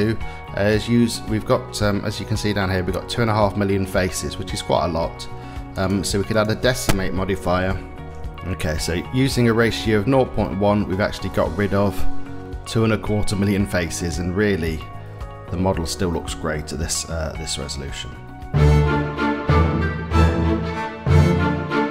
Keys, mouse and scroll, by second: 5.4-8.1 drag, 10.1 middle click, 10.9-11.2 shift+middle drag, 11.5-12.3 middle drag, 13.1-13.5 middle drag, 14.4 middle click, 16.2-17.3 middle drag.